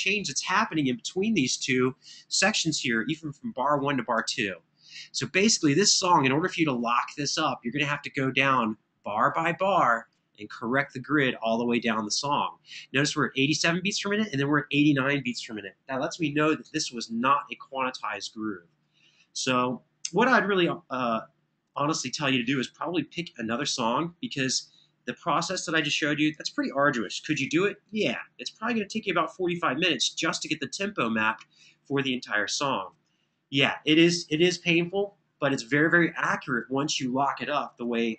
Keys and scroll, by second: 3.5 super+[, 3.9 super+[.